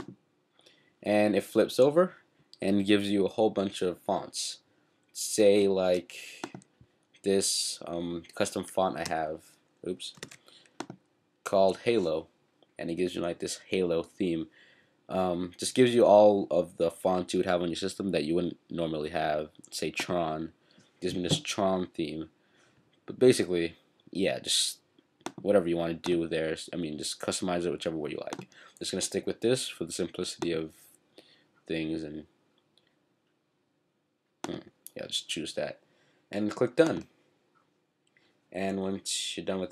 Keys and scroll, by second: 10.2 super+z.